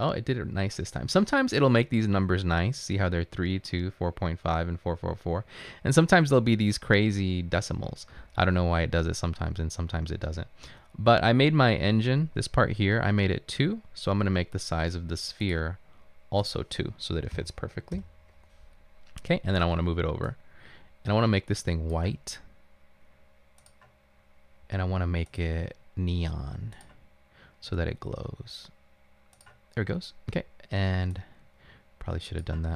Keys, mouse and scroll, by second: 17.4 2, 18.0 Return.